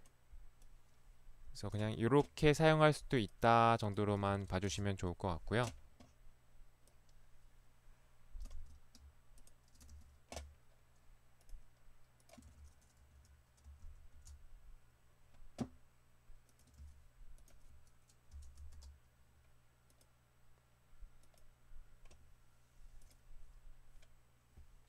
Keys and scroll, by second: 1.8 ctrl+c, 4.7 ctrl+v, 4.7 Return, 8.5 ctrl+c, 10.1 ctrl+c, 12.5 ctrl+v, 13.8 Home, 14.1 Return, 16.8 ctrl+v, 18.4 Home, 18.6 h, 18.7 Return.